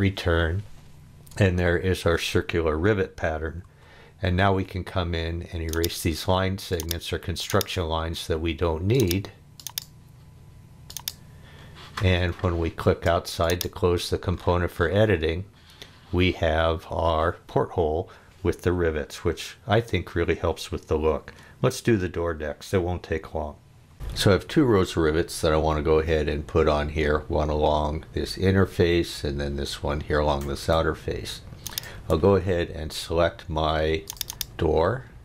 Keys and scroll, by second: 3.6 e, 12.8 space.